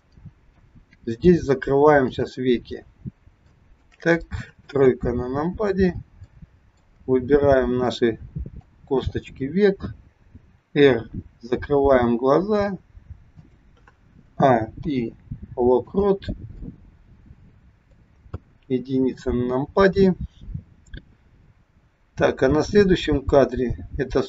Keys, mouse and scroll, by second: 2.0 click, 2.6-3.0 scroll down 3, 3.2 scroll down 2, 3.4 shift+middle click, 4.3 middle click, 4.9 KP_3, 5.3-5.9 scroll up 3, 5.9 scroll up 1, 6.3 shift+middle click, 7.8 click, 10.4 r, 14.2 a, 14.9 i, 16.7 middle click, 18.3 KP_1.